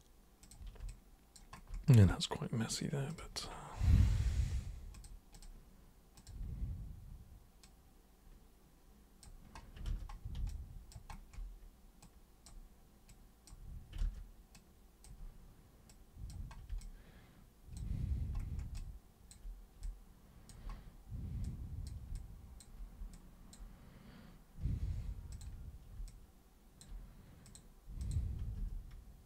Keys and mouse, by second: 0.4 super+click, 0.8 alt+super+click, 3.1 super+click, 4.9 super+click, 5.3 super+click, 6.1 super+click, 7.6-9.2 super+drag, 10.4 alt+super+click, 12.0 super+click, 13.0 super+click, 14.5 super+click, 15.8 super+click, 16.8 alt+super+click, 18.7 alt+super+click, 19.8 alt+super+click, 21.4 super+click, 22.1 alt+super+click, 23.1 alt+super+click, 25.3 super+click, 26.0 alt+super+click, 27.4 super+click, 28.0 super+click, 28.5 super+s.